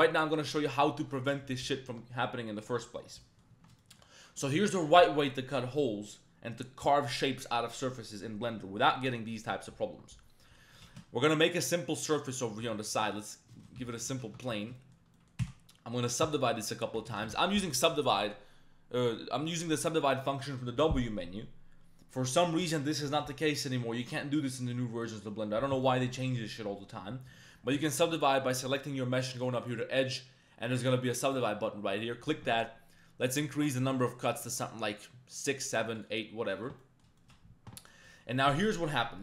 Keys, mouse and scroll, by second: 3.2 middle click, 3.6 Tab, 3.8 shift+middle click, 10.4 middle click, 10.8 shift+a, 12.2 shift+drag, 12.6 g, 13.1 shift+click, 13.5 shift+drag, 13.7 g, 13.9 click, 14.1 shift+middle drag, 14.3 Tab, 14.5 middle click, 14.8 shift+middle click, 15.1 middle click, 15.4 w, 16.2 w, 17.1 ctrl+z, 17.2 ctrl+z, 29.3-31.4 drag, 31.9 middle click, 33.5 click, 33.9 click, 34.4-36.7 drag, 36.8 middle click, 37.2 shift+middle click, 37.9 middle click, 38.6 middle click.